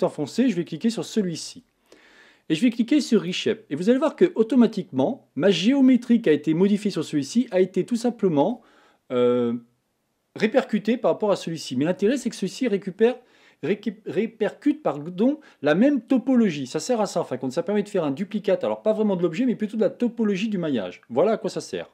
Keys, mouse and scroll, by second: 0.8 shift+click, 4.1 click, 4.7-12.4 middle drag, 12.4 Tab.